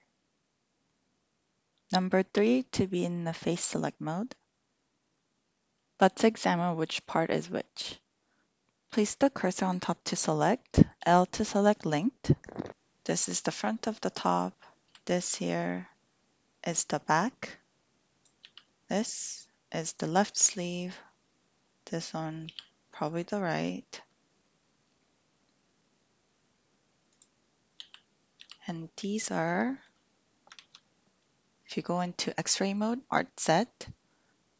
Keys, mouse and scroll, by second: 2.4 3, 10.9 l, 14.8 l, 15.9-18.2 middle drag, 18.4 l, 21.8 click, 22.4 l, 27.1 click, 27.8 l, 29.4 click, 30.7 alt+z.